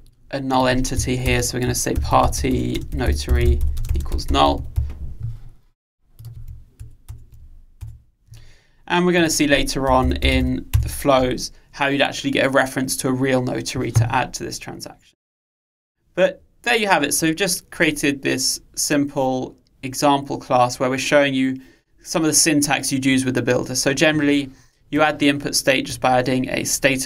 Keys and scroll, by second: 7.2 alt+Return, 10.7 Return.